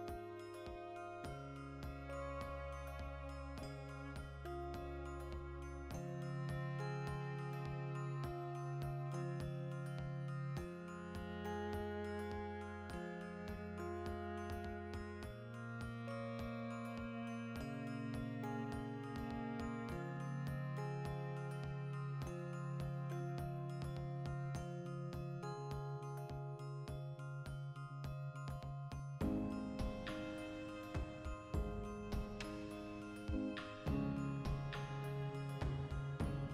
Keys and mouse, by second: 0.9-3.1 middle drag, 3.1 alt+q, 4.3 shift+s, 4.8 shift+a, 6.6 F9, 12.0 Escape, 12.6 x, 13.0 middle click, 13.8 x, 14.6 ctrl+middle click, 14.9 alt+q, 15.5 Escape, 15.7 middle click, 16.1 shift+middle click, 16.7 click, 16.9 shift+a, 18.6 F9, 30.2 1, 31.2-35.2 drag, 33.7 Escape, 35.2-36.4 ctrl+middle drag, 35.8 g, 36.4 click.